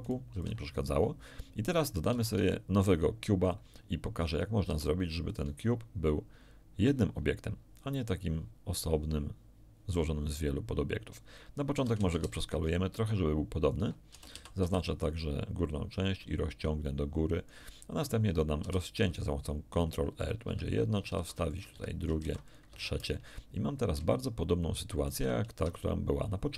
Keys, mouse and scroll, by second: 0.0 ctrl+right click, 0.3 ctrl+x, 0.4 ctrl+click, 2.0 shift+a, 3.4 click, 4.6 Tab, 5.2-7.0 ctrl+drag, 11.7 s, 12.0 shift+z, 13.6 ctrl+click, 14.0 ctrl+a, 14.3 ctrl+z, 14.6 ctrl+b, 14.7 ctrl+click, 16.0-17.6 ctrl+drag, 18.6 ctrl+r, 20.2 click, 20.4 Escape, 21.1 ctrl+r, 21.4 ctrl+click, 21.7 Escape, 22.2 ctrl+r, 22.4 ctrl+click, 22.6 Escape, 24.0-25.2 shift+middle drag, 25.5 Tab.